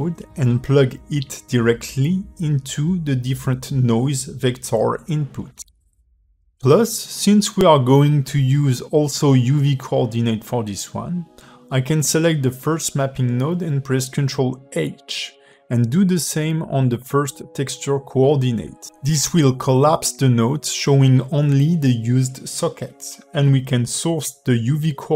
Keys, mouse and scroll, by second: 0.2 x, 0.8 click, 1.9 click, 3.3 click, 6.9 click, 7.4 g, 15.8 click, 17.1 ctrl+h, 17.9 click, 18.6 ctrl+h, 19.8 click, 21.3 click.